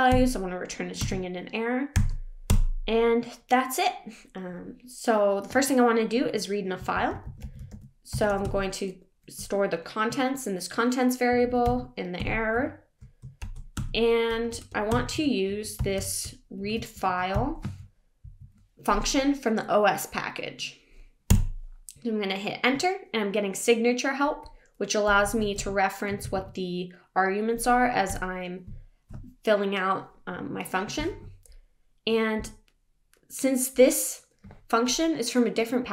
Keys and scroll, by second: 14.3 BackSpace, 18.2 Down, 21.5 Return, 28.1 Return.